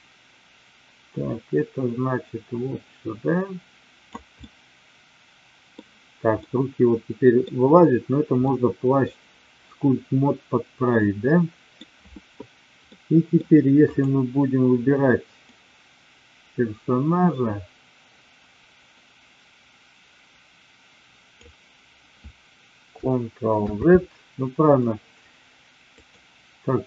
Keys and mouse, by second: 4.4-5.8 middle drag, 6.5-7.4 middle drag, 8.4-11.8 middle drag, 12.9-13.4 middle drag, 13.9 click, 15.5-21.4 drag, 23.8 ctrl+z, 25.9 click.